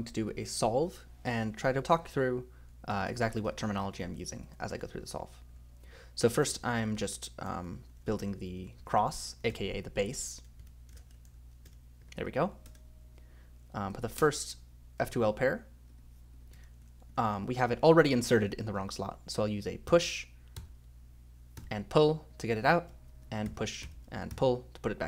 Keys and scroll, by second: 2.6-6.4 typing, 6.6 ctrl+z, 6.8 ctrl+z, 7.6-12.7 typing, 10.9 ctrl+space, 11.0 ctrl+z, 14.2 BackSpace, 16.5 ,, 16.8 ;, 17.1 ;, 19.9-24.8 typing.